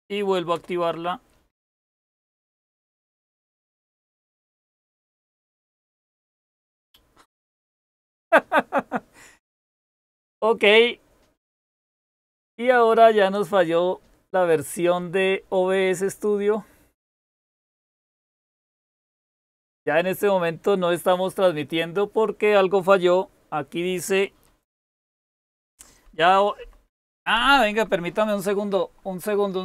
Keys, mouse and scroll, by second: 0.4 Return, 25.3 ctrl++, 25.6 ctrl++, 25.9 ctrl++, 26.2 ctrl++.